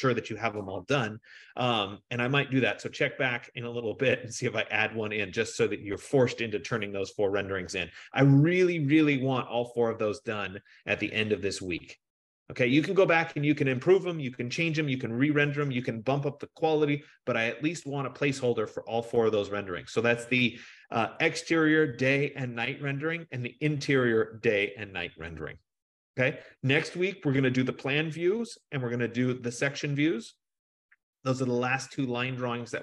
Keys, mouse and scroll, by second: 14.5 F15.